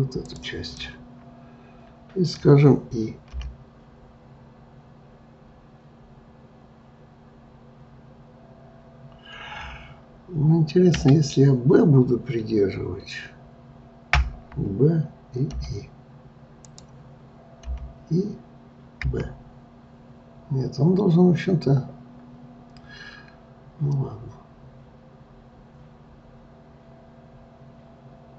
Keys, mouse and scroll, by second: 0.2 shift+click, 0.8-3.4 middle drag, 14.2 b.